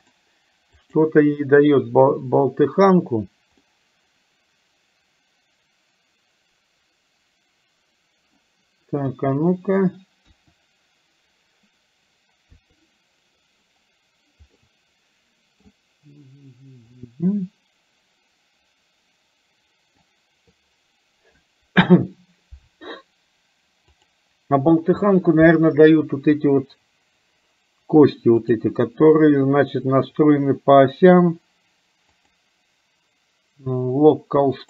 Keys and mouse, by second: 0.9 click, 3.7-8.5 middle drag, 9.1 KP_1, 10.4 KP_1, 12.5 KP_3, 14.6-15.6 middle drag, 17.1-20.1 middle drag, 28.4 click, 32.4-34.6 drag.